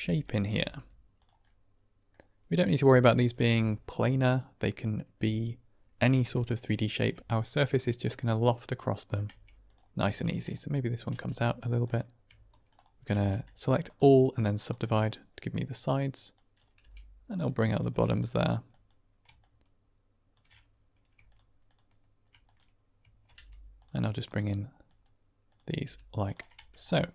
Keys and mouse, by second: 0.1 click, 0.4 r, 0.5 r, 1.1 click, 1.4 middle click, 2.5 middle click, 6.1 shift+middle click, 8.7 middle click, 9.2 Tab, 9.6-9.9 drag, 9.9 Tab, 10.2 click, 11.0 g, 11.7 click, 12.4 shift+right click, 12.7 shift+click, 13.2 a, 13.9 right click, 14.7 middle click, 15.2 click, 16.2 click, 16.7 g, 17.2 click, 17.6 click, 17.8 g, 18.1 click, 18.6 click, 19.4 shift+click, 23.2 g, 23.7 click, 24.0 click, 25.4 click, 25.7 g, 26.1 click, 26.5 Tab, 26.7-27.1 drag.